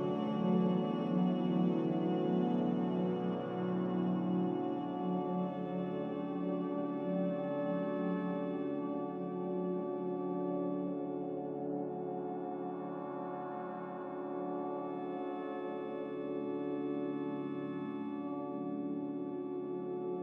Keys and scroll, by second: 1.5 Delete, 2.4 m, 9.5 typing, 9.7 Return, 16.7 a.